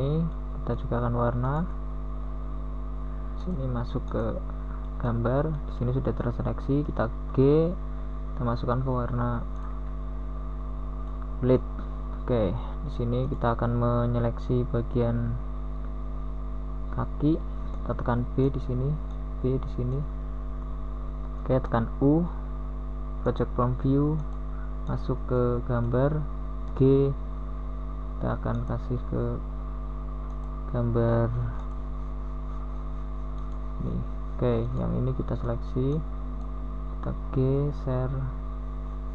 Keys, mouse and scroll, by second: 1.5 g, 5.4 r, 10.9 g, 20.0 KP_1, 21.9 Tab, 24.2 Tab, 27.4 KP_1, 32.7 g, 38.4 KP_1.